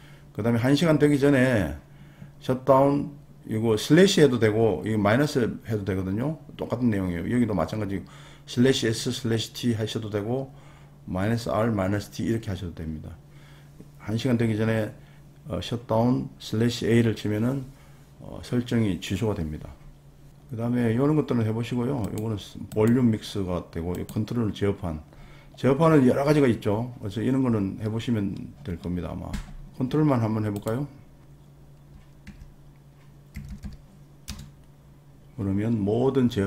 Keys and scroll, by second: 32.3 super+r, 33.1-34.1 typing, 34.3 Return.